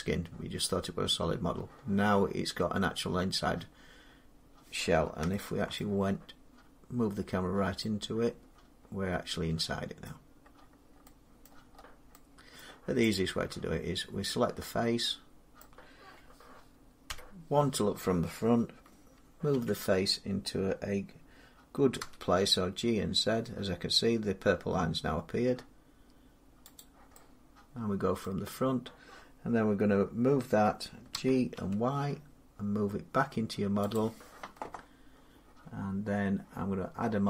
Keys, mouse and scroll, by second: 3.5-3.9 scroll, 5.6-7.6 shift+middle click, 5.9-7.1 scroll, 7.1 shift+middle click, 9.9 middle click, 10.0 middle click, 10.0-10.4 scroll down 2, 10.4-11.5 scroll down 8, 11.3 middle click, 11.7-12.1 scroll, 12.5-14.9 middle click, 13.0 click, 15.4 middle click, 16.9 1, 19.3 g, 21.8 z, 26.6 click, 27.1 middle click, 28.0 middle click, 31.0 g, 31.1 scroll, 31.4 y, 33.1 g, 33.8 click.